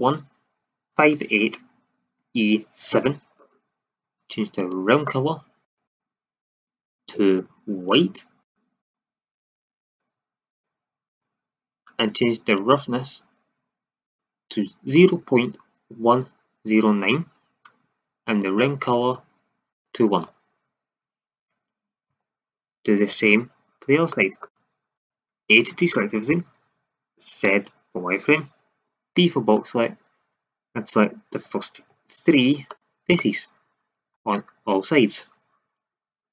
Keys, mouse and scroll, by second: 4.5-7.0 drag, 12.5 click, 18.6 click, 19.0 click, 22.1 shift+z, 23.1 KP_1, 24.9 a, 27.4 z, 29.1 b, 31.8 z.